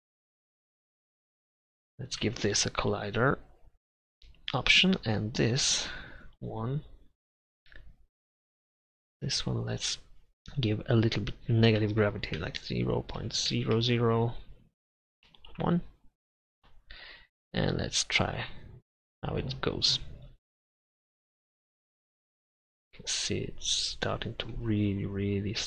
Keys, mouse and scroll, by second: 1.1 Tab, 1.3 a, 1.4 s, 2.3 Tab, 3.3 click, 3.8-5.0 middle drag, 5.0 right click, 5.3 click, 7.9 click, 8.8 middle click, 11.1-13.3 drag, 13.8 0, 20.2-21.9 drag, 24.6-25.6 middle drag.